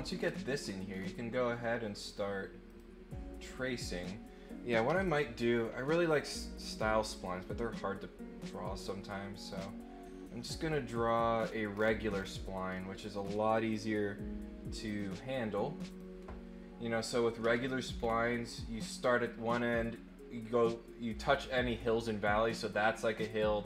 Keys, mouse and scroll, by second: 0.1 scroll down 1, 0.5-1.0 scroll up 2, 1.9 click, 2.6 click, 6.2 click, 7.1 click, 9.5 click, 11.0 click, 11.3 scroll up 1, 11.7-12.2 scroll down 2, 12.7-13.4 scroll up 3, 14.8 click, 15.8 click, 17.9 scroll down 2.